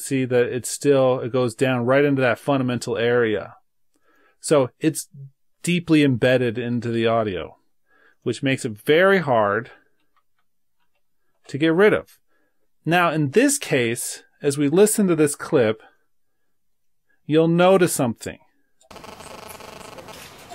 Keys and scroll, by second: 6.8 super+z, 10.3 super+z.